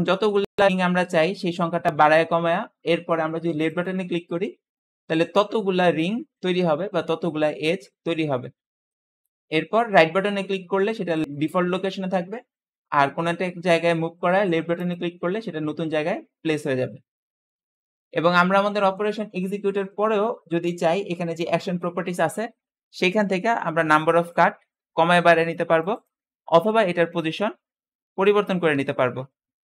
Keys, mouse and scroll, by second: 23.8-29.6 drag.